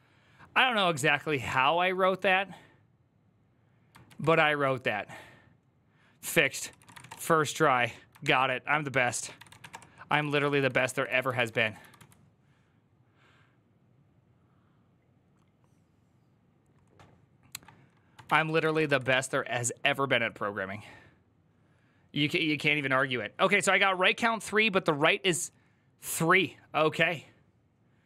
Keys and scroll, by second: 3.9 ctrl+a, 4.1 ctrl+a, 6.1 ctrl+c, 6.3 ctrl+c, 6.5-7.4 typing, 8.0 ctrl+h, 9.0-11.7 typing, 18.4-19.3 typing.